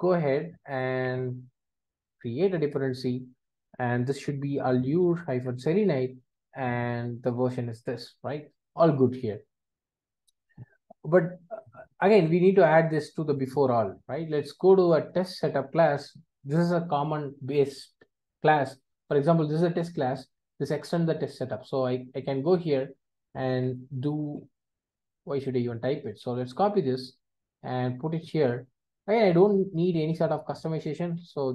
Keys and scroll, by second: 2.9 Return, 5.7 Return, 21.3 super+b, 28.2 super+v.